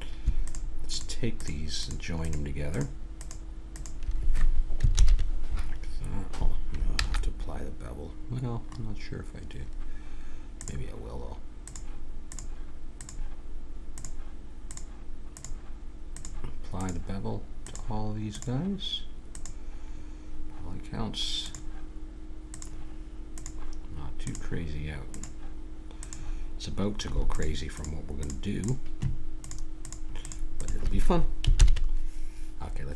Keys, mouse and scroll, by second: 4.9 ctrl+j, 6.9 ctrl+z, 8.7-10.2 middle drag, 10.6-21.0 drag, 21.4-32.4 drag, 31.5 ctrl+j.